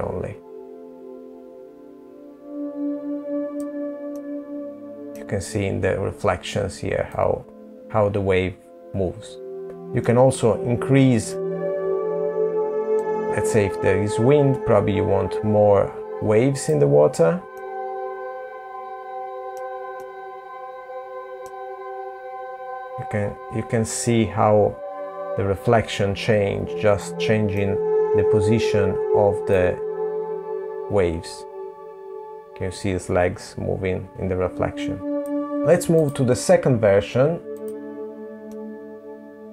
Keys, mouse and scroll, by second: 2.7 middle click, 5.6 click, 9.6 middle click, 11.5 click, 16.1 middle click, 18.9 middle click, 21.7 click, 25.7 middle click, 26.6-28.1 scroll up 2, 28.1 click, 34.8 click, 35.4 click, 36.8 middle click.